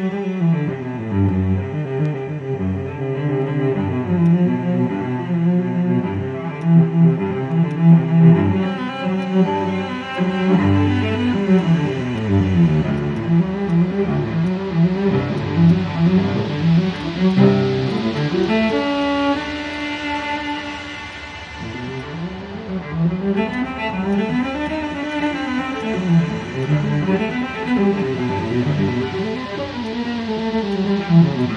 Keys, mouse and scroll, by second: 5.6 scroll up 1, 5.8-6.5 scroll down 1, 6.9 alt+click, 7.4 alt+middle click, 9.2 right click, 13.2 double click, 17.0 double click, 17.3 alt+click, 18.0 double click, 18.1 alt+click, 18.7 double click, 19.0 alt+click, 19.4 alt+middle click, 21.1 alt+click, 21.7 scroll down 1, 22.0 alt+click, 30.0-30.7 scroll up 1, 30.7 alt+click.